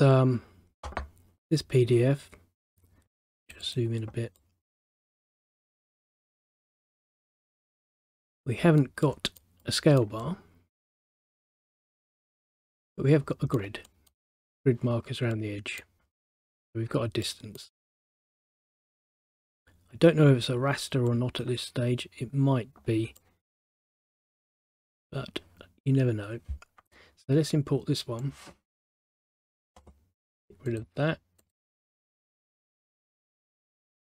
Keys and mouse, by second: 3.3 click, 4.5 middle click, 5.2 middle click, 6.4 middle click, 12.0 middle click, 17.4 middle click, 21.2 middle click, 23.3 middle click, 28.3 click, 30.8 click, 31.5 click.